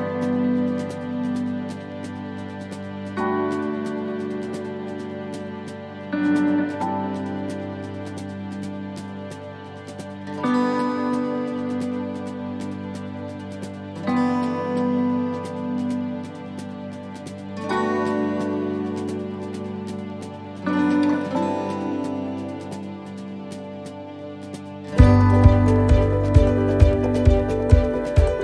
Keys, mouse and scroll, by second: 1.1 middle click, 2.3 shift+middle click, 2.9-3.4 scroll up 3, 3.5 ctrl+r, 5.4 right click, 5.8 middle click, 7.8 right click, 7.8 middle click, 8.3 middle click, 9.2 shift+middle click, 9.3 shift+middle click, 10.3 shift+right click, 11.4 click, 13.5 middle click, 14.8 ctrl+r, 15.8 middle click, 16.9 ctrl+r, 18.0 right click, 18.8 right click, 19.5 shift+right click, 19.7 shift+right click, 20.0 middle click, 20.6 shift+middle click, 21.2 middle click, 22.7 shift+right click, 23.6 shift+right click, 26.5 shift+right click, 26.5 click, 28.1 middle click.